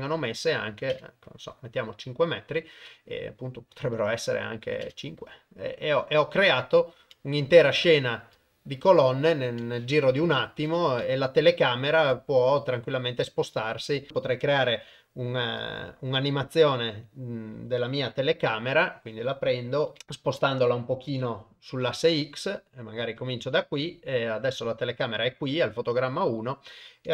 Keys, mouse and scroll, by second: 0.5 click, 4.5 click, 6.6 shift+middle click, 7.2-8.3 middle drag, 8.4 shift+middle click, 9.1 shift+middle click, 10.2 KP_0, 11.1 shift+middle click, 12.2 ctrl+middle click, 12.5-13.5 ctrl+drag, 13.6 shift+click, 14.1 ctrl+Tab, 15.7-16.7 shift+middle drag, 19.9 g, 21.0 g, 26.3 click.